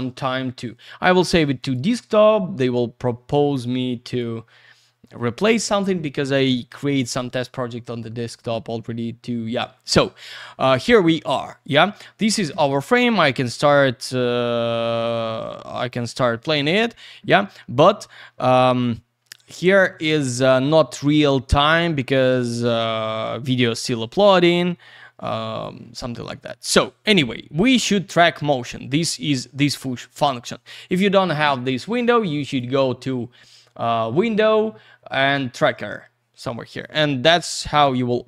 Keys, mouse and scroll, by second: 1.6 click, 1.7 click, 3.6 click, 12.5 space, 23.1 click, 32.4 click, 36.7 click, 36.8 click.